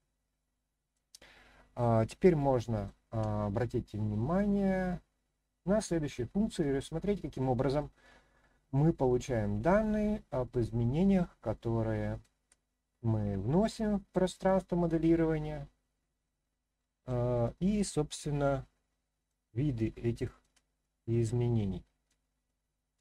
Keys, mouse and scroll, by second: 1.2-1.5 scroll down 2, 1.6-2.0 scroll up 1, 2.2-2.9 shift+middle drag, 11.5-12.2 shift+middle drag, 17.4-19.3 middle drag, 19.7-20.4 shift+middle drag, 20.8-22.1 middle drag, 22.4-23.0 middle drag.